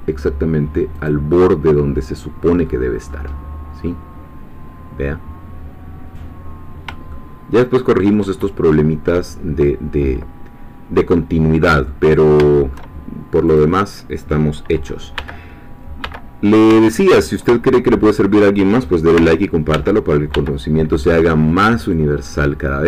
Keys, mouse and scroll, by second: 1.0 click, 1.4-2.6 middle drag, 3.3-3.8 scroll down 2, 3.8-8.3 middle drag, 10.5-10.9 scroll down 2, 11.1-12.1 middle drag, 12.1-12.5 scroll up 3, 12.5 shift+middle click, 13.5 click, 15.2 l, 16.0 l, 17.2-17.5 scroll down 1, 19.2 l, 21.1 scroll down 2, 21.5-22.8 middle drag.